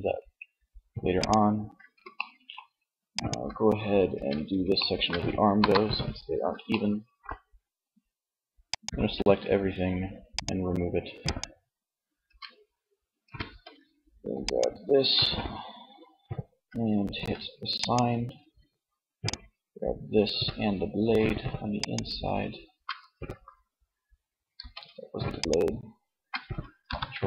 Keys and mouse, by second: 0.3-1.5 drag, 1.5 middle click, 3.0 click, 3.2 Tab, 4.6 KP_1, 8.3-11.8 drag, 11.4 Tab, 12.5 Tab, 17.1-18.6 drag, 18.9 click, 19.3 z, 22.5 z, 23.6 z, 25.7-26.9 drag, 25.9 ctrl+l, 26.9 z.